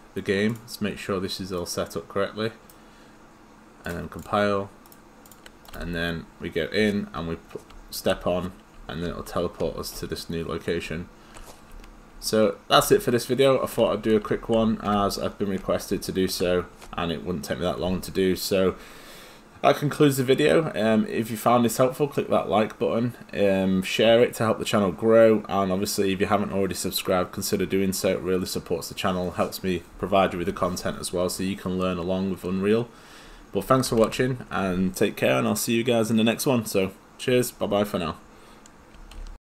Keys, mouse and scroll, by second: 2.2 right click, 3.8 click, 4.9 right click, 5.3 click, 5.7 right click, 5.8 w, 7.2 w, 7.7 w, 9.1 w, 9.6 w, 10.8 w, 12.1 w, 12.9 w, 14.0-15.9 typing, 33.6 a, 33.9 s, 34.9 d, 39.2 alt+F9.